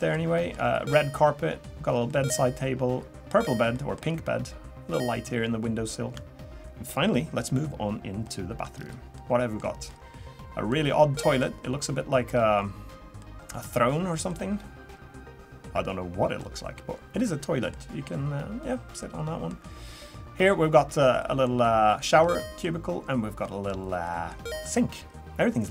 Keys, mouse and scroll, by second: 0.3 shift+middle click, 0.7 middle click, 2.1 middle click, 3.7 middle click, 5.3-5.6 scroll down 1, 8.2 shift+middle click, 8.7 scroll up 5, 9.1 middle click, 11.2 middle click, 11.8 middle click, 13.9-14.3 scroll down 2, 14.3-22.4 middle click.